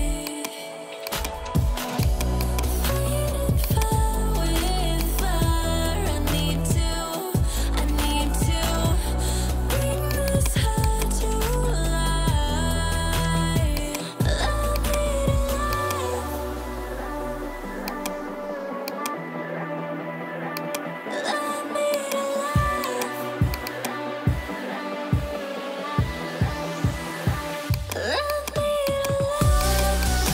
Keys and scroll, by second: 9.2 ctrl+j, 12.2 2, 12.9 Return, 24.8-25.6 typing, 25.9 Return.